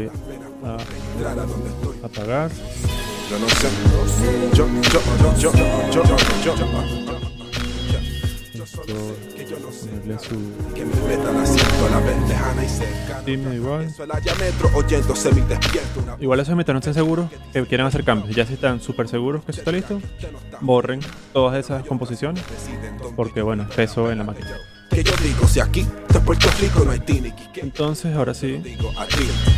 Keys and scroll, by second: 16.6 z, 17.9 alt+v, 20.1 0.